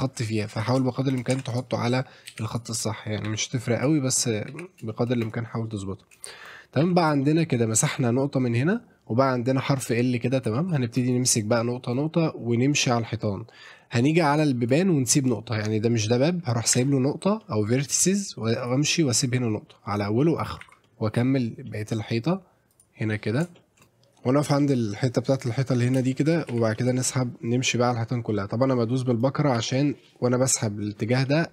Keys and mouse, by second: 0.9 shift+middle drag, 1.3 Tab, 1.5 click, 2.3 Delete, 3.3 a, 3.5 click, 4.0 shift+middle click, 4.5 a, 4.9 shift+middle click, 5.2 click, 6.3 shift+middle click, 7.2 shift+middle click, 10.6 shift+middle click, 11.0 click, 11.9 click, 14.5 shift+middle click, 16.7 e, 17.4 middle click, 18.6 click, 20.6 e, 21.7 middle click, 22.7 click, 23.6 shift+middle click, 24.7 shift+middle click, 26.1 shift+click, 26.5 e, 26.7 middle click, 29.6 e, 31.3 middle click.